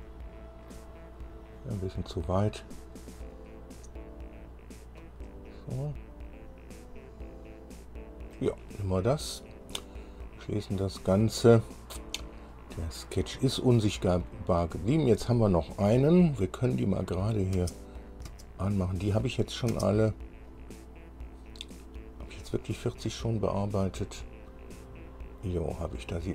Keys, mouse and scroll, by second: 1.3-1.7 scroll up 2, 3.5-5.4 drag, 5.5 scroll down 2, 6.0-8.7 drag, 8.8 scroll down 2, 10.4 click, 13.0 scroll down 2, 17.2 click, 17.7 space, 18.2 click, 18.4 space, 19.9 click, 19.9 space, 20.7 click, 22.6 click, 24.4 scroll up 1, 25.0-25.4 scroll up 1, 25.6 scroll up 1, 26.2 scroll down 2.